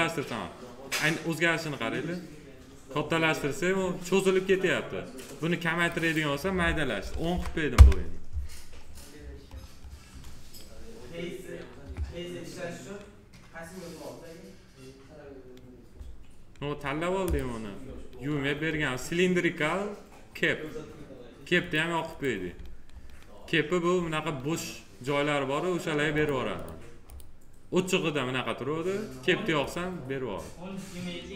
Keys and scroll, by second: 6.9 1, 7.6 Return.